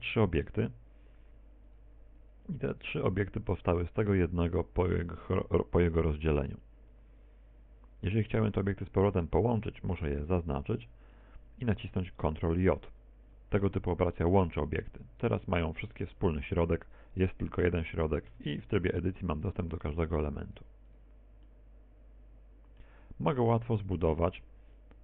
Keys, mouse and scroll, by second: 0.9 Tab, 1.6 right click, 2.4 right click, 4.2 right click, 4.9 right click, 5.5 right click, 5.9 right click, 10.4 right click, 12.3 shift+right click, 13.2 shift+right click, 14.6 ctrl+j, 17.2 r, 20.3 Tab, 21.6 right click, 22.0 right click, 22.6 right click, 23.0 right click, 23.5 middle click.